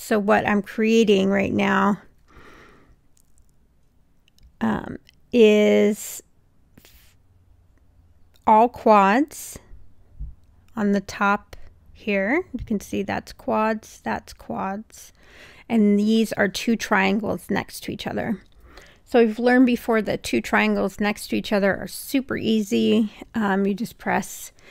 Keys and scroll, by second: 0.8 Return, 18.7 super+BackSpace.